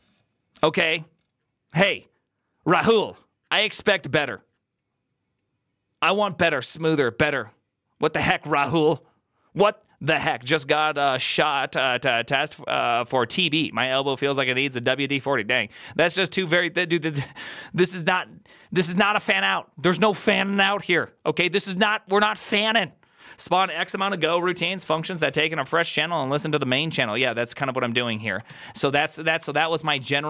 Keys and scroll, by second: 29.3 ctrl+c, 29.8 ctrl+u, 29.9-30.2 typing.